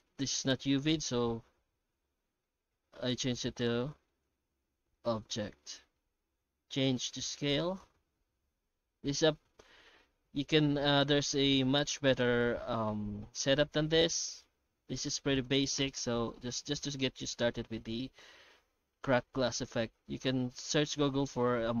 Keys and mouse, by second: 4.6 middle click, 5.2 shift+middle click, 5.6 middle click, 6.8 middle click, 7.8-11.3 shift+drag, 11.7 middle click, 12.9-14.4 middle drag, 15.5-17.2 drag, 17.7-20.4 middle drag, 20.7-21.8 middle drag.